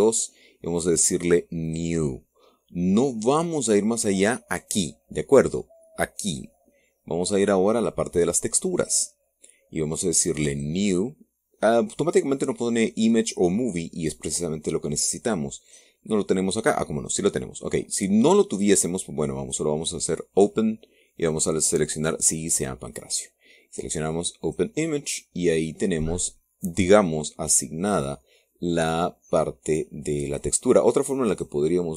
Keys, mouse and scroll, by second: 2.4 click, 9.4 click, 11.2 click, 16.4 click, 20.1 click, 20.5 click, 21.9 click, 25.1 click.